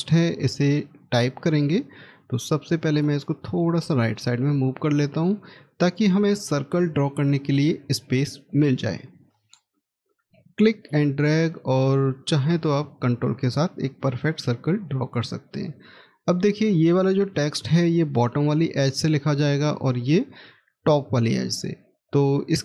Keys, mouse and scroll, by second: 4.3 middle click, 16.5 middle click, 17.1-18.1 scroll up 1.